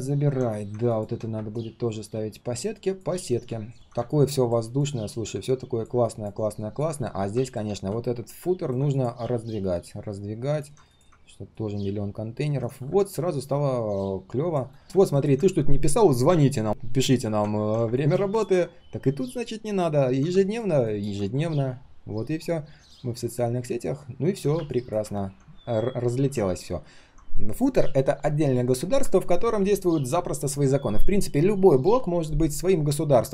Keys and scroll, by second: 3.7 ctrl+shift+4, 26.7 ctrl+shift+4, 29.4 ctrl+shift+4.